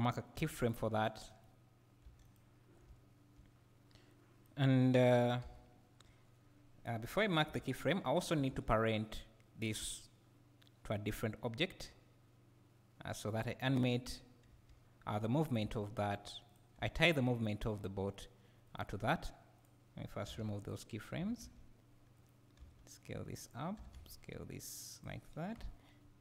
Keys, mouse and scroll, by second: 0.3 g, 2.3 g, 2.4 click, 2.9 `, 3.5 scroll up 1, 5.5 KP_7, 5.6 KP_7, 7.8 x, 14.1 scroll down 1, 15.7 g, 16.5 g, 16.6 click, 16.8 s, 18.8 right click, 19.6 click, 20.7 x, 23.5 click, 23.8 s, 25.0 click, 25.6 KP_1.